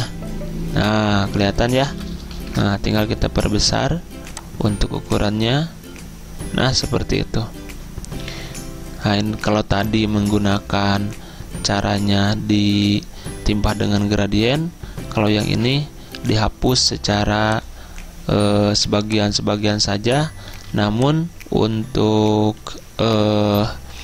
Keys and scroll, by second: 2.4 ctrl+z, 20.6 z.